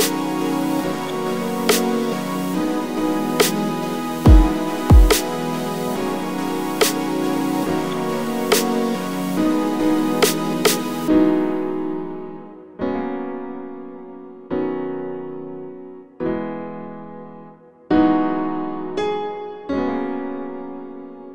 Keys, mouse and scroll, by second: 0.9-1.5 scroll up 2, 1.5 g, 2.9 click, 3.9 ., 4.5 s, 5.1 click, 5.1-10.7 middle drag, 7.6 KP_7, 7.8-8.6 scroll up 2, 8.6 h, 9.2 ctrl+z, 10.0 g, 10.9 1, 11.0 click, 11.3 shift+click, 11.6 ctrl+b, 13.3 2, 13.3 click, 13.7 g, 14.7 3, 14.8 click, 15.1 middle click, 15.5 e, 15.9 click, 16.0 s, 17.9 Escape, 18.0-19.6 middle drag, 18.3 s, 19.6 click, 19.7 middle click, 20.4 2, 20.7 click, 20.9 click, 21.2 2.